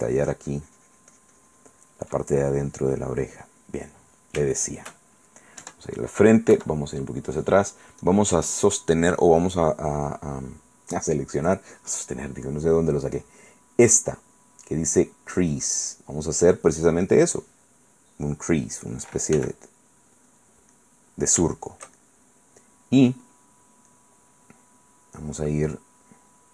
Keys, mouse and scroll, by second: 2.5-4.7 ctrl+middle drag, 5.8 shift+KP_1, 6.7 KP_Subtract, 8.2 click, 17.0 click, 19.6 f, 20.5 click, 20.9-22.7 middle drag, 24.1-26.5 middle drag.